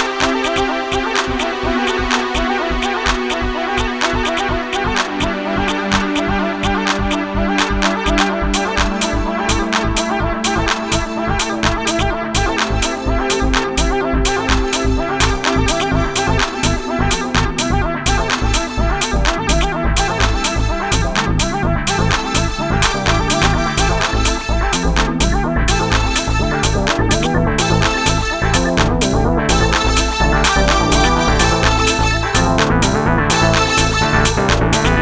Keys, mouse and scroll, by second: 0.0-3.1 drag, 3.1 middle click, 3.5 click, 4.8 click, 7.5 a, 7.8 a, 8.2 a, 9.3 click, 9.3 s, 11.0 shift+z, 32.3-35.0 middle drag.